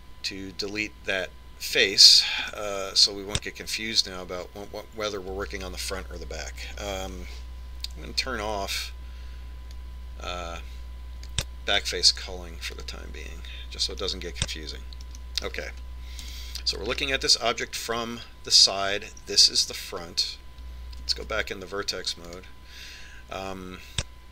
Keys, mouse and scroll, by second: 0.7 x, 4.1-5.7 middle drag, 11.3 click, 14.3 click, 15.6-20.6 middle drag, 17.8 KP_3, 22.8 ctrl+Tab.